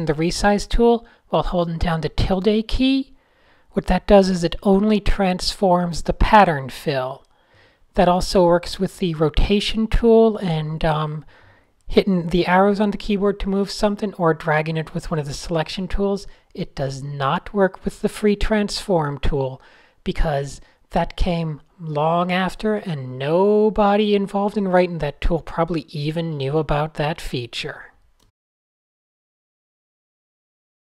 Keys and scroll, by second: 0.0 s, 0.2 `, 1.4 super+z, 1.6-6.0 typing, 4.2 super+z, 5.2 fn+F7, 6.7 super+z, 6.8 Tab, 7.2 Tab, 8.1 super+z, 9.0 super+z, 9.8 super+a, 10.0 alt+super+g, 11.0 n, 11.5 super+z, 12.4 Tab, 13.2 super+z, 15.0 super+z, 15.0 super+z, 16.2 super+z, 17.6 super+z, 18.5 super+z, 19.0 super+z, 19.6 super+z, 19.7 super+z, 20.1 super+z, 21.0 Tab, 23.2 Tab, 23.3 Tab, 26.7 n, 27.1 super+z, 27.5 super+z, 28.3 shift+8, 28.8 super+z, 29.0 super+z, 29.8 super+z, 29.9 super+z, 30.0 super+z, 30.5-30.8 typing.